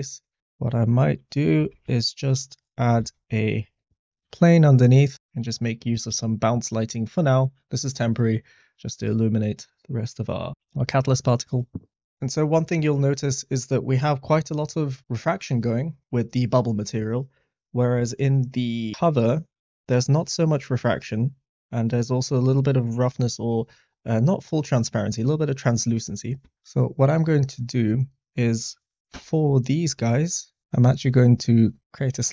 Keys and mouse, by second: 0.5 middle click, 1.7 shift+a, 2.9 s, 4.1 g, 4.2 z, 4.8 click, 11.1 shift+middle drag, 12.6 shift+middle click, 28.6 click, 29.9 middle click, 31.7 click, 32.1-32.3 drag.